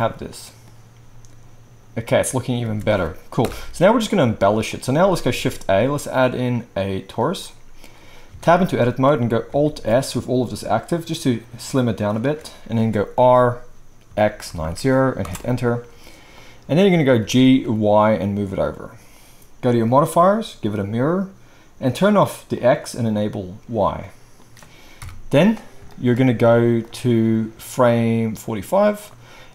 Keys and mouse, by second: 2.6 space, 3.4 shift+Left, 5.3 shift+a, 7.2-8.3 drag, 8.3 Tab, 9.0-19.9 middle drag, 9.6 alt+s, 13.1 r, 17.2 g, 19.9-22.6 drag, 22.6-23.1 middle drag, 23.1 click, 23.4-26.8 middle drag, 25.0 KP_1, 26.8-29.5 drag.